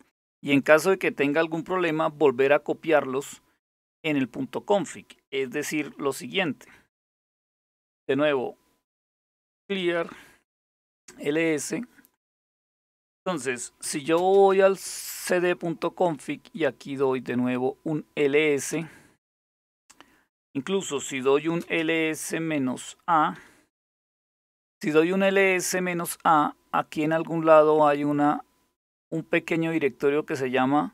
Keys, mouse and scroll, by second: 6.9-7.2 typing, 7.5 Return, 8.8-10.8 typing, 13.2-16.3 typing, 15.1 Return, 18.4 Return, 20.6-23.0 typing, 26.0-28.4 scroll up 1, 28.4-30.0 scroll up 1, 30.0-30.9 drag.